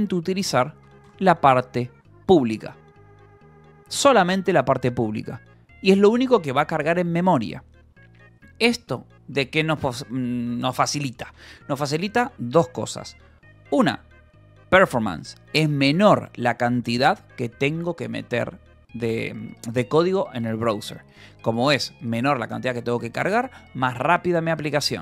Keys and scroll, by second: 0.5 j, 1.7 k, 8.3 Escape.